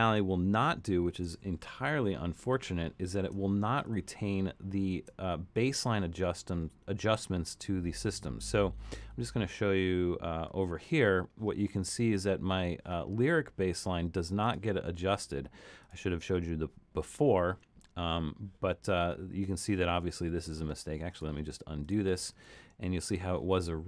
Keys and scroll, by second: 3.9 super+=, 4.4 super+=, 22.3 super+z.